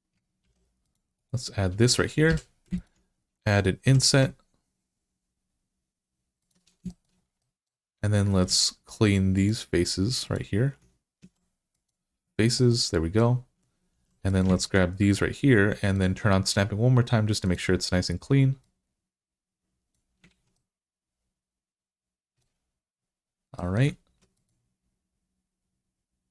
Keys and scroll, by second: 0.3 ctrl+r, 2.1 3, 3.7 i, 11.1 x, 13.8 2, 20.1 alt+z, 23.9 ctrl+r.